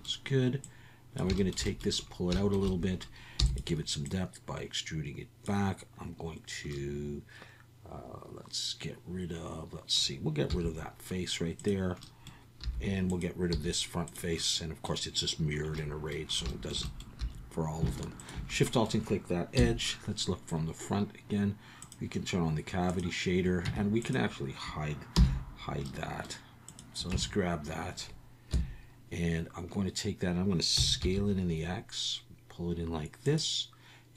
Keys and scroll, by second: 3.4 e, 10.5 x, 12.6 3, 13.5 x, 17.2 2, 19.6 KP_1, 23.6 Tab, 25.1 h, 27.1 Tab, 28.5 KP_1, 30.7 s, 31.0 x.